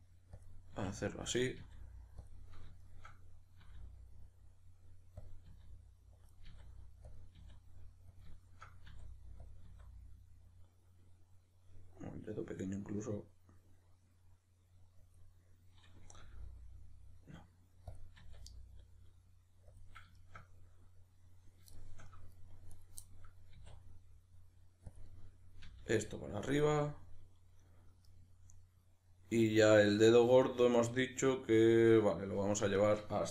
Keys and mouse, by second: 0.5 click, 0.7 e, 1.4 click, 1.6 e, 2.3 click, 2.5-5.3 middle drag, 3.7 e, 5.3 click, 5.5 e, 6.3 click, 6.5 e, 7.2 click, 7.4 e, 8.2 click, 8.4-9.5 shift+middle drag, 8.9 e, 9.5 click, 9.7 e, 15.2 click, 16.2 g, 18.0 click, 18.2 e, 19.8 click, 20.1-22.7 shift+middle drag, 22.7 right click, 23.0-25.0 middle drag, 23.5 e, 25.0 click, 25.0-26.5 middle drag, 25.6 e, 26.5 click, 26.6-32.8 middle drag, 32.8 shift+right drag.